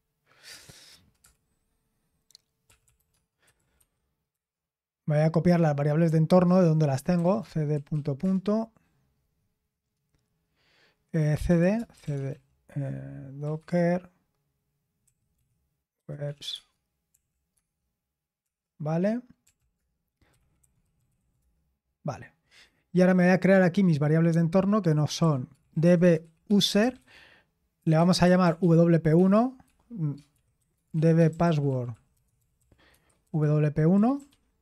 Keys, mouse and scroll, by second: 1.2 Return, 2.4-4.3 typing, 6.9-8.4 typing, 11.1-13.6 typing, 15.0-21.7 typing, 23.3 click, 24.9-29.1 typing, 30.3-34.6 typing.